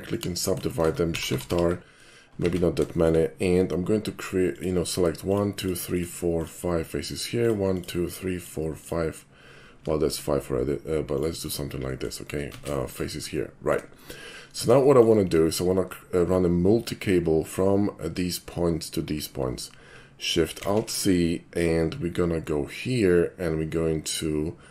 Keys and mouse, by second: 0.1 shift+click, 1.1 shift+r, 2.5 ctrl+z, 2.9 shift+middle click, 4.5 shift+click, 5.3 shift+click, 5.6 shift+click, 5.9 shift+click, 6.3 shift+click, 7.4 shift+click, 7.7 shift+click, 8.0 shift+click, 8.3 shift+click, 8.8 shift+click, 10.1 shift+click, 11.1 shift+click, 11.4 shift+click, 11.8 shift+middle click, 12.5 ctrl+z, 12.9 shift+click, 13.4 shift+middle click, 14.0 shift+middle click, 14.8 shift+middle click, 20.6 alt+shift+c.